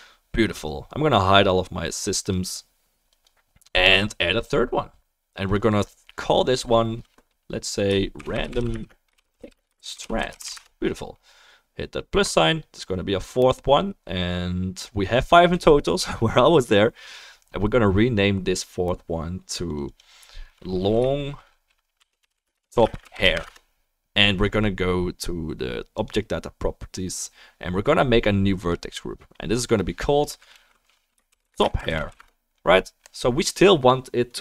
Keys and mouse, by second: 1.0-3.2 drag, 5.5-19.7 drag, 5.5-28.7 middle drag, 19.9-26.0 drag, 28.6 click, 29.6 right click.